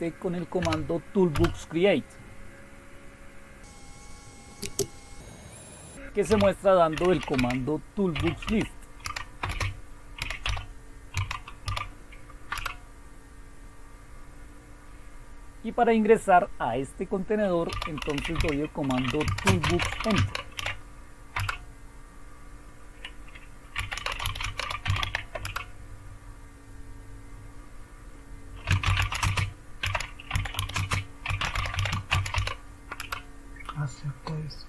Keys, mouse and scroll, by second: 0.0-0.6 typing, 1.3 Return, 3.6 Return, 3.6-12.5 typing, 17.5-21.3 typing, 23.6-25.5 typing, 28.5-32.8 typing, 32.9 Return.